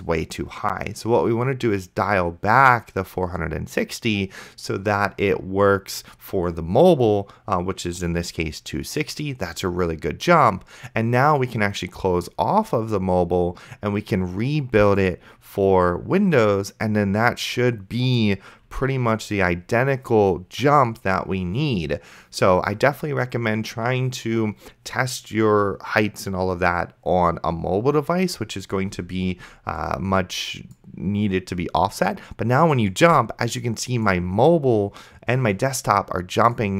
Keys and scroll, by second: 18.9 F5.